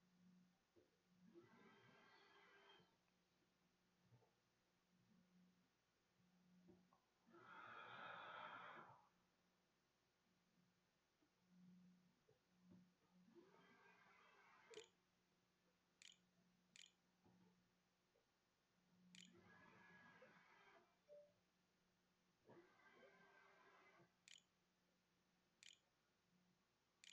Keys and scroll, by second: 13.0-18.6 typing, 23.0-27.1 typing.